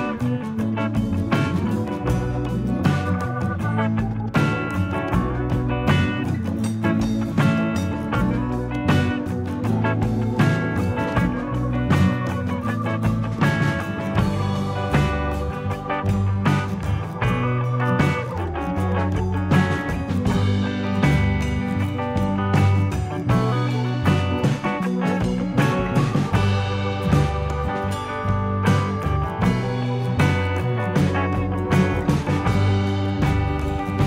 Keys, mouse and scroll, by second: 0.6 click, 2.0 click, 2.6 click, 3.3 click, 4.2 click, 5.7 click, 6.3 shift+middle click, 7.3 click, 7.8-8.6 scroll down 3, 8.7 shift+middle click, 9.5 click, 11.2-12.3 scroll up 5, 12.5 click, 14.4 click, 15.3 click, 18.3-19.0 scroll up 6, 19.4 shift+middle click, 21.0 click, 24.0 click, 24.3 scroll down 3, 24.6 shift+middle click, 26.4 click, 28.7 e, 29.6 click, 31.8-32.6 scroll up 2, 33.2 click, 33.8 click.